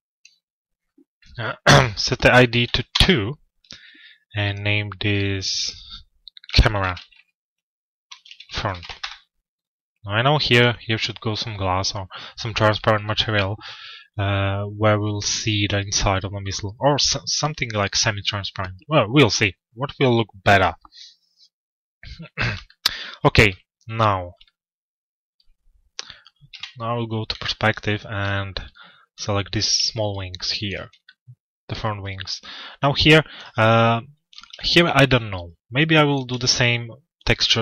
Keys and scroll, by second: 2.5 Return, 8.5 Return, 26.0 p.